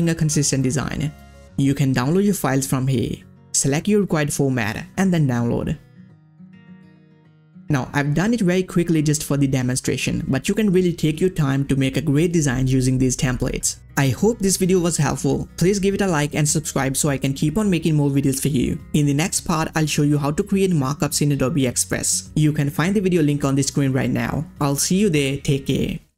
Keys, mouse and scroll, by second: 0.5 click, 0.7-1.3 ctrl+scroll up 1, 1.3-1.8 ctrl+scroll down 1, 2.8 click, 3.8 click, 4.8 click, 8.5 click, 9.6 click, 9.8-11.2 ctrl+scroll up 1.